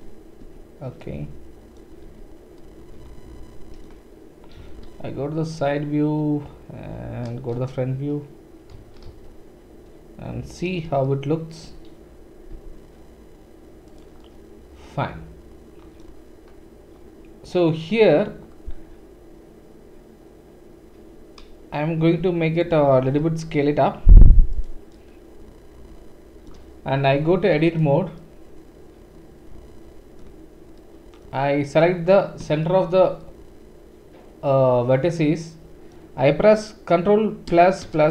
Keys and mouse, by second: 0.4 Tab, 1.6-6.9 right drag, 2.0 Tab, 4.6 KP_3, 5.5 KP_1, 6.9-9.6 middle drag, 7.5 KP_1, 8.7 KP_1, 9.1 KP_3, 9.6-14.4 right drag, 12.5 g, 14.4 drag, 14.6 right click, 14.6 click, 14.7 right click, 14.9 click, 15.0-15.5 right drag, 15.1 click, 15.3 click, 15.5-22.7 drag, 22.0 g, 22.7-27.6 middle drag, 23.0 s, 24.5 typing, 27.1 Tab, 27.1 typing, 27.6 click, 27.8-31.6 middle drag, 30.9 click, 31.6 click, 31.8-38.1 middle drag, 37.5 ctrl+KP_Add, 37.5 typing, 37.9 ctrl+KP_Add.